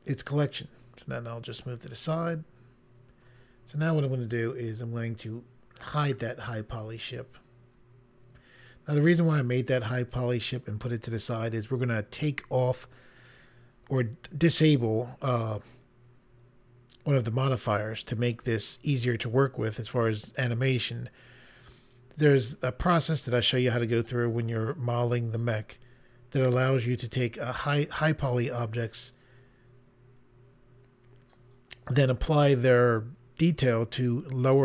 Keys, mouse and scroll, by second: 5.8 click.